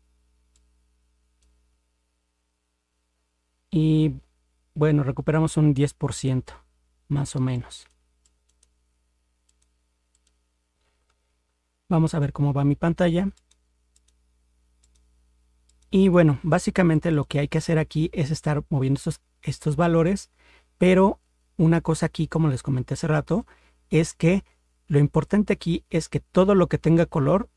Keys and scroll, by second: 11.0 ctrl+0.